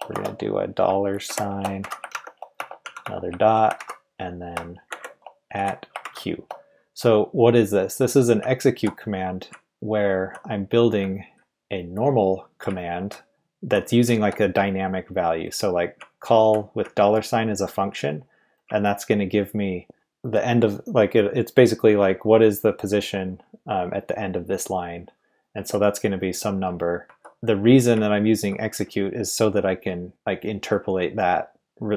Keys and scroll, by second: 0.0-0.1 typing, 1.3-3.8 typing, 4.9 shift+2, 5.5 q, 6.0 shift+', 8.4 Left, 8.6 Left, 8.7 Left, 8.7 Left, 11.0 Right, 11.2 Right, 12.7 Right, 13.3 Left, 13.4 Left, 13.5 Left, 14.0 Left, 14.0 Right, 14.6 Right, 16.0 Left, 16.8 Right, 18.3 Right, 18.6 Left, 25.5 Right, 26.6 Right, 27.0 Left, 28.8 Right.